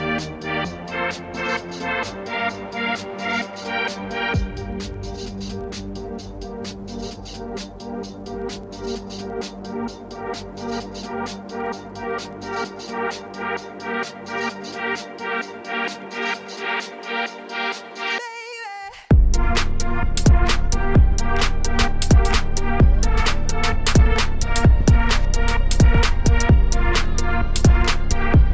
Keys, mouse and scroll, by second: 0.1 KP_1, 0.4 g, 1.0 KP_0, 1.6 ctrl+s, 2.2-2.6 scroll down 3, 2.6 click, 3.0 click, 4.8 g, 6.5 shift+d, 6.9 r, 7.9 ., 8.5 r, 10.9 alt+r, 11.4 g, 14.2 KP_7, 14.6 scroll down 4, 15.1 g, 16.2 KP_0, 16.7 ctrl+s, 16.8 scroll up 2, 18.5 z, 20.9 Left, 23.0-24.3 drag, 25.1 click, 25.8-27.5 drag.